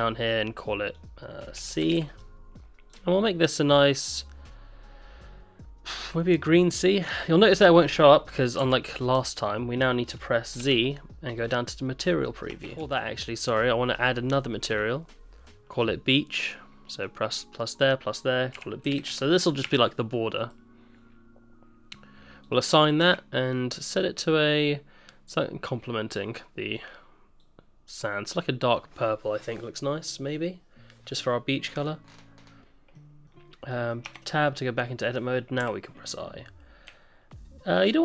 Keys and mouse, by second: 0.9-2.3 drag, 7.1 middle click, 8.6 n, 9.1 n, 10.8 z, 12.2 middle click, 12.6 Tab, 13.1 ctrl+z, 14.7 click, 16.9 click, 17.8-20.5 drag, 22.4 click, 22.8 middle click, 24.1 Tab, 32.9 middle click, 33.7 middle click, 34.0 Tab, 34.8 middle click.